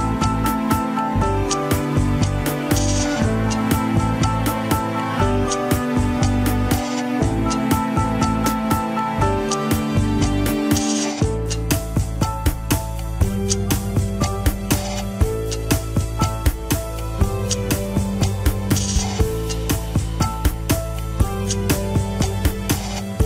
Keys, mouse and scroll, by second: 5.5 middle click, 6.5 scroll down 2, 7.0 g, 11.3 alt+z, 12.2 ctrl+click, 12.8 alt+z, 13.0-15.5 middle drag, 15.5-17.4 drag, 17.4 alt+z, 18.5 ctrl+click, 19.0 alt+z, 19.4-22.3 drag, 22.3 alt+z.